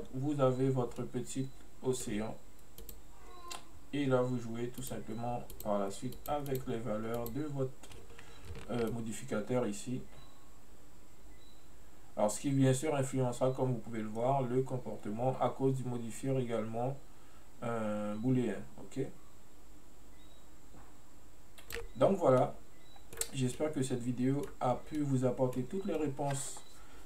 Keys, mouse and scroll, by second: 0.4-1.1 scroll up 1, 1.1 scroll up 1, 1.1-2.9 middle drag, 2.9 click, 4.9 click, 5.6-6.4 drag, 6.6 click, 7.3 click, 9.0-12.0 shift+drag, 22.5-27.0 middle drag.